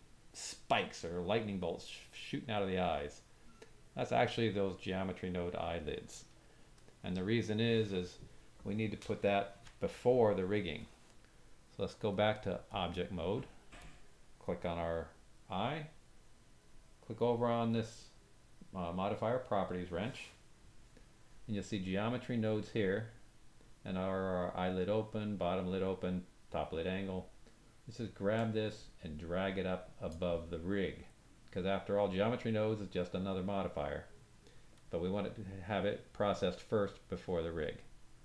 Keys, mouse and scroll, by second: 2.5-12.1 drag, 13.8 click, 17.6 click, 28.3-30.0 drag.